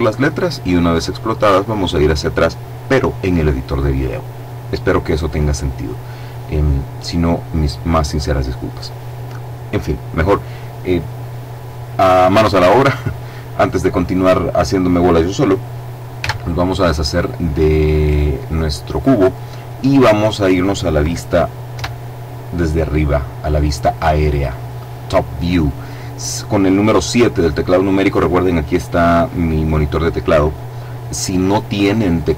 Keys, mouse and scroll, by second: 16.1 x, 17.1 click, 19.6-20.7 drag, 21.7 KP_7.